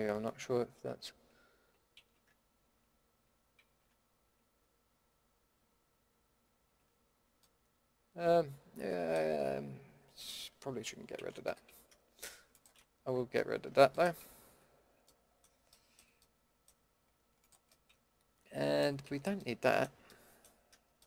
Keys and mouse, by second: 0.9 ctrl+x, 2.0 ctrl+z, 2.6 ctrl+x, 3.6 ctrl+z, 6.5 ctrl+x, 11.1 ctrl+z, 11.4 a, 13.1 ctrl+x, 17.4-18.7 middle drag, 19.0 ctrl+x.